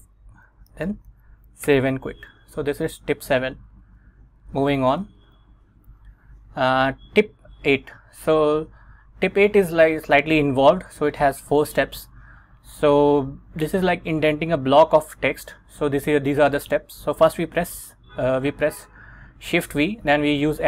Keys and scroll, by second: 0.8 shift+;, 1.2 x, 1.8 Return, 3.8 super+Tab, 4.6 super+Tab, 5.2 Return, 6.0 Right.